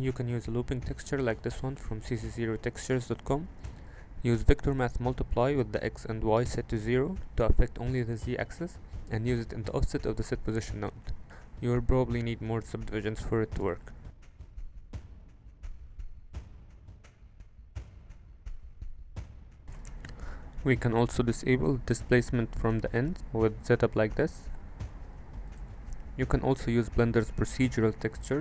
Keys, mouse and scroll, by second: 3.5-4.5 drag, 6.9 click, 7.7 click, 8.3 middle click, 9.2-10.1 drag, 10.8 Tab, 11.6 alt+z, 12.8 click, 13.3 alt+z, 13.5 middle click, 14.3 middle click, 15.2 click, 17.4 click, 20.0-24.2 middle drag, 26.0 shift+space.